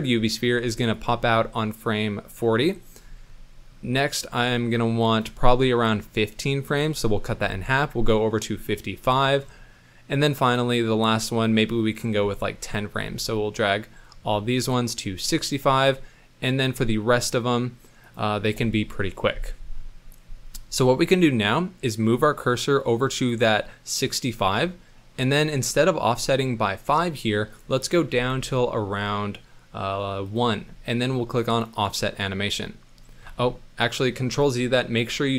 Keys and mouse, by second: 0.3 click, 3.6 middle click, 4.2-5.2 drag, 5.6 middle click, 7.2 g, 10.0 middle click, 10.7-11.9 drag, 12.2 middle click, 14.2 g, 21.3 middle click, 22.8 click, 25.0 middle click, 27.5-30.4 drag, 31.6 click, 33.3 ctrl+z.